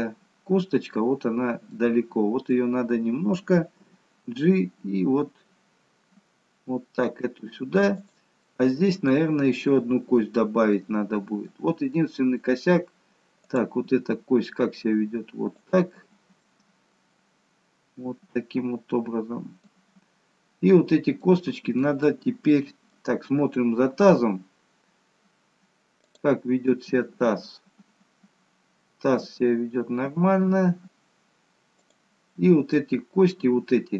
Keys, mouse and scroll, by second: 1.7 middle click, 3.9 g, 8.4 middle click, 9.6 middle click, 11.1 middle click, 12.2 middle click, 13.3 click, 13.8 g, 15.9-16.4 scroll down 2, 16.4 middle click, 19.9-20.5 scroll up 1, 20.5-21.2 scroll down 1, 21.2 middle click, 22.3 middle click, 23.4-24.6 scroll down 2, 24.6-25.0 scroll down 1, 25.4-26.0 scroll down 1, 26.0 click, 26.8 g, 32.8 middle click, 32.8 scroll up 2.